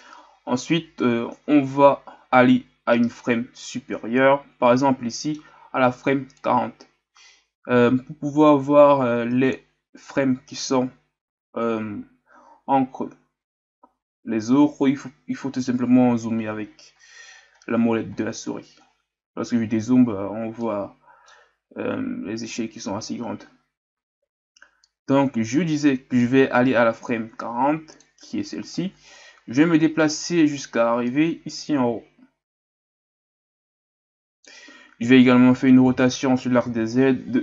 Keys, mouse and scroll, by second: 1.1-3.6 scroll up 4, 3.6-4.9 scroll up 1, 4.9-6.4 scroll up 1, 6.4-16.0 drag, 27.4-37.4 drag.